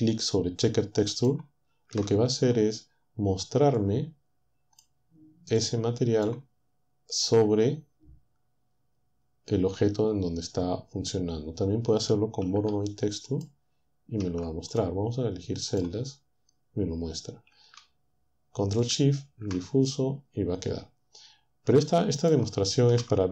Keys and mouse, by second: 1.1 ctrl+shift+click, 3.8-5.0 drag, 5.6 click, 13.3 ctrl+shift+click, 14.7 ctrl+click, 15.7 click, 18.9 ctrl+shift+click, 22.2 ctrl+shift+click.